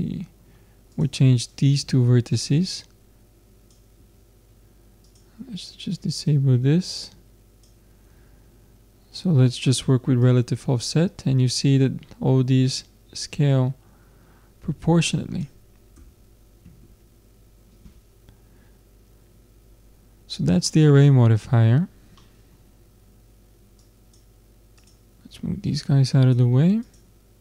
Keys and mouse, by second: 0.9-4.5 drag, 4.0 Tab, 5.1-8.2 drag, 8.2 Tab, 10.2-12.1 drag, 16.0 Tab, 20.7-23.8 middle drag, 23.8-27.4 drag.